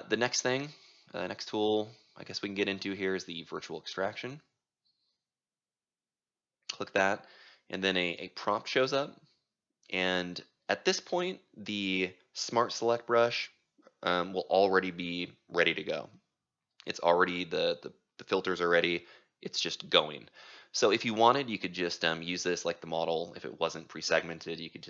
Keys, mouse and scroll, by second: 0.1-10.0 drag, 15.9-19.7 right drag, 19.7-21.0 drag, 21.0-24.0 right drag, 24.0 click.